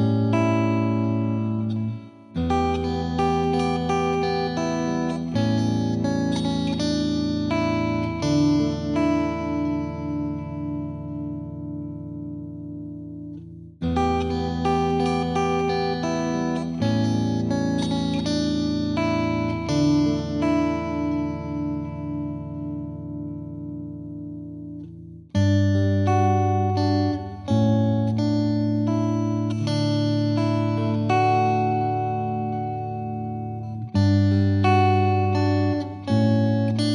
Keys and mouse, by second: 0.4 ctrl+click, 0.9 click, 1.8 click, 4.2-5.3 drag, 5.4-6.5 drag, 6.5 Caps_Lock, 7.8-8.8 typing, 13.2 ctrl+space, 15.0 click, 19.1-20.6 middle drag, 23.0-24.0 drag, 29.4-30.4 drag, 31.4-32.3 typing, 35.6 Return.